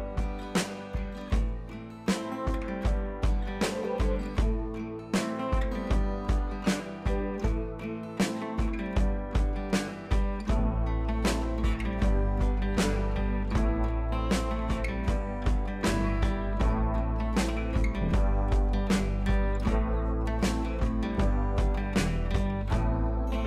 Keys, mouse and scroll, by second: 0.4-0.9 scroll down 1, 4.3 ctrl+d, 5.0-6.3 drag, 6.3 ctrl+c, 7.3 click, 8.7 ctrl+v, 9.2 scroll up 1, 9.8 ctrl+t, 10.1 click, 10.9-12.9 alt+drag, 12.9 scroll down 1, 13.5 scroll up 1, 13.7 alt+click, 14.9 ctrl+t, 15.0 right click, 15.5 click, 17.3 scroll down 1, 18.4-19.8 drag, 19.8-20.2 scroll up 1, 20.8 scroll down 1, 20.9 scroll up 1, 21.7 scroll down 1.